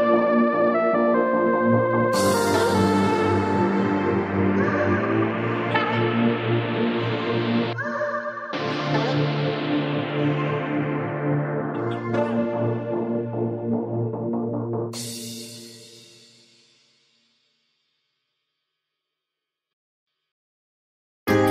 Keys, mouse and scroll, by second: 0.6 click, 1.2-1.5 scroll up 6, 1.5 drag, 2.1 click, 3.0 shift+click, 3.7 ctrl+p, 4.8-5.2 scroll down 3, 5.2-7.1 shift+middle drag, 7.1 drag, 7.7 drag, 8.2 shift+click, 8.8 ctrl+p, 10.5 click, 11.0 click, 11.4 shift+click, 12.1-13.0 drag, 13.0-13.9 scroll down 11, 13.9-17.2 drag, 17.2-18.3 scroll up 14, 18.3-19.0 drag, 19.0-19.7 shift+middle drag, 19.7 drag, 20.2 click, 20.8 click, 21.4 shift+click.